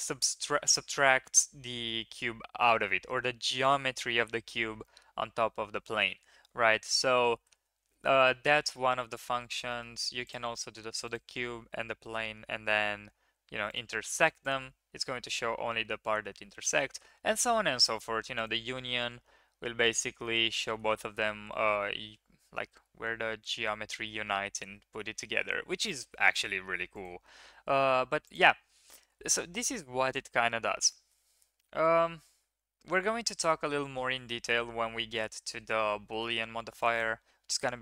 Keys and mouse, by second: 7.0 ctrl+z, 7.5 ctrl+z, 8.2 drag, 8.7 drag, 8.8 middle click, 9.5 shift+middle click, 9.6 shift+click, 9.7 click, 11.0 shift+click, 13.7 click, 16.2 ctrl+z, 16.8 ctrl+z, 18.3 click, 19.0-20.0 middle drag, 20.2 shift+middle drag, 20.6 drag, 25.7 click, 26.3 click, 27.9 x, 30.9 shift+drag, 32.5 ctrl+KP_3, 34.2 shift+middle drag, 35.3 shift+middle click, 36.2 shift+middle drag.